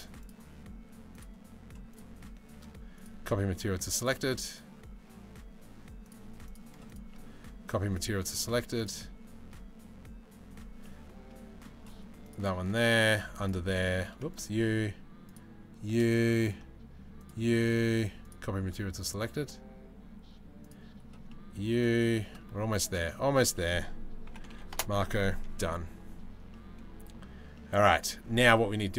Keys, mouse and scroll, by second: 2.5-3.7 middle drag, 7.6 middle click, 10.4-11.3 middle drag, 12.6 click, 13.0 click, 15.8 middle click, 16.8 shift+middle click, 17.8-18.8 middle drag, 20.2 middle click, 20.9-21.3 middle drag, 20.9-21.3 drag, 21.8 click, 21.8 middle click, 21.8 right click, 23.1-24.4 drag, 26.1-26.7 middle drag, 27.2 middle click.